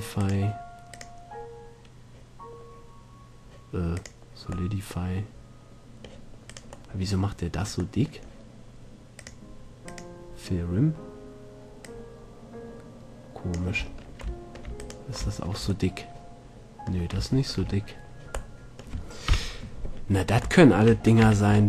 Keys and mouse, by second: 4.9-5.7 middle drag, 6.7-9.4 middle drag, 9.4-11.9 drag, 11.9 middle click, 12.0-14.0 drag, 14.0-14.6 middle drag, 15.0-16.6 middle drag, 19.5 KP_7, 21.4 z.